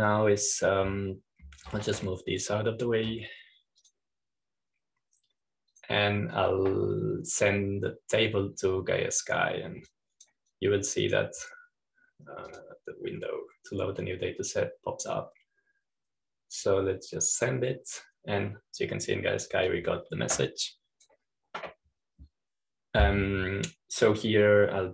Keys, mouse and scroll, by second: 0.0 click, 3.9-5.3 drag, 5.7 click, 7.6-9.7 drag, 11.8-13.8 drag, 14.3 click, 19.2-20.3 drag, 21.9-22.9 drag, 22.9 middle click, 23.5-24.9 drag.